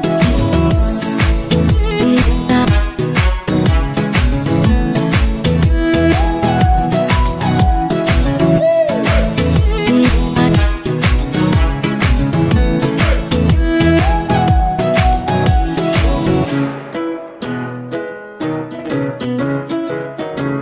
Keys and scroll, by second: 9.3 w.